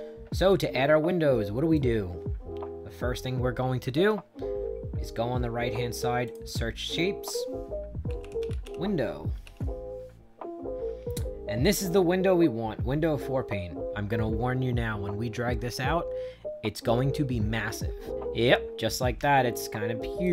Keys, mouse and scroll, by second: 0.4-1.6 right drag, 6.1 click, 7.7-9.3 typing, 18.1 middle click, 18.7 middle click, 19.4 shift+right click.